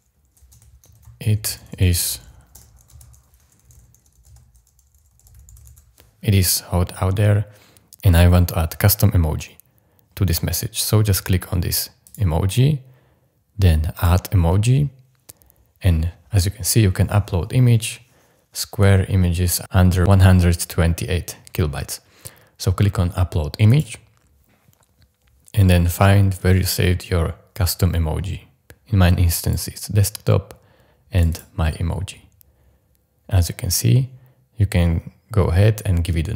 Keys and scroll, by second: 0.5-6.1 typing.